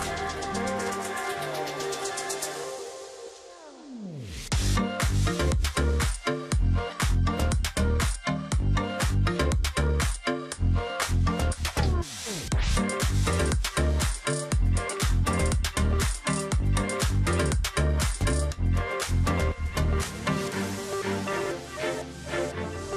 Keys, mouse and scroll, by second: 0.5 ctrl+z, 2.7 alt+click, 4.3 shift+x, 5.0 ctrl+click, 6.5 ctrl+click, 7.4 ctrl+click, 8.4 ctrl+click, 10.0 ctrl+click, 12.3 ctrl+click, 13.1-13.9 alt+scroll down 1, 13.9-14.8 alt+scroll up 1, 14.8 ctrl+alt+click, 15.8 alt+scroll down 1, 17.3-18.0 alt+scroll up 1, 18.0 space, 18.2-18.6 alt+scroll up 1, 18.6 ctrl+click, 20.0 space.